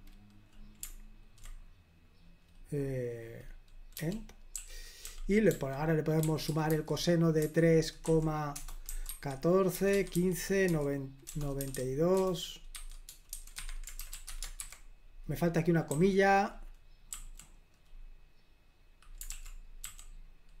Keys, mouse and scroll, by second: 4.0-14.5 typing, 13.6 Escape, 14.7 super+h, 15.9 typing, 17.2 typing, 19.4-19.9 typing.